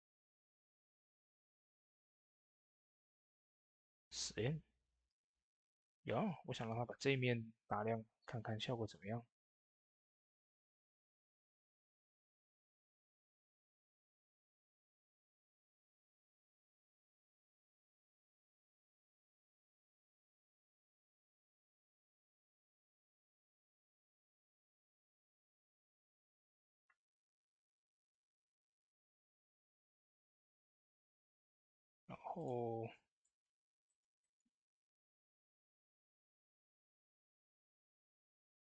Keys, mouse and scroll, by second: 2.9 click, 2.9 typing, 3.0 click, 9.4-32.3 drag, 9.4 typing, 11.3-14.2 drag, 16.0 typing, 16.0-19.5 drag, 20.3-23.1 drag, 32.8 scroll down 2, 33.1 shift+middle click, 34.0 shift+middle click, 35.3 shift+d, 37.7 middle click, 38.1 shift+middle click, 38.4-38.7 shift+scroll down 2.